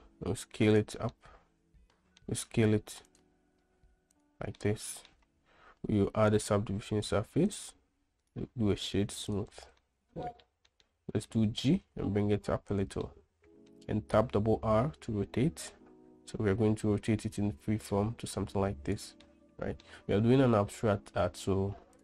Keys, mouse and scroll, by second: 1.4-2.6 middle drag, 3.2 s, 3.8 s, 4.9-5.4 middle drag, 6.6-7.9 drag, 8.7-9.7 drag, 10.1-10.6 middle drag, 11.0 middle click, 11.6-12.0 middle drag, 12.2 g, 13.4-14.1 middle drag, 14.5 r, 19.6-20.2 middle drag.